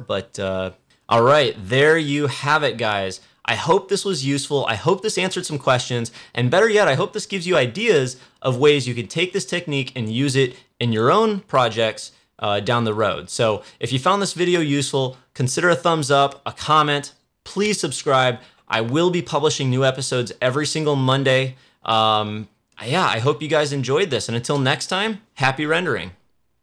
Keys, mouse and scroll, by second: 0.8 click.